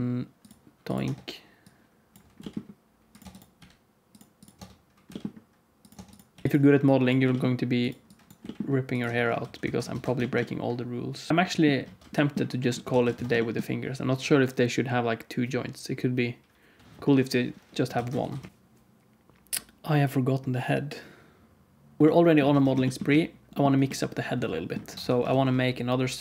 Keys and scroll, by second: 1.0 Tab, 2.3 g, 3.1 Tab, 3.5 g, 4.5 Tab, 5.0 g, 5.9 Tab, 6.2 g, 6.4 KP_7, 7.1 g, 8.3 g, 9.0 Tab, 9.3 alt+z, 9.5 alt+a, 9.9 ctrl+s, 11.3 ctrl+s, 11.3 alt+shift+z, 12.8 alt+a, 13.1 ctrl+s, 17.9 alt+a, 18.2 ctrl+s, 22.0 ctrl+s, 22.5 ctrl+s, 24.9 Tab, 24.9 shift+s, 25.2 shift+a.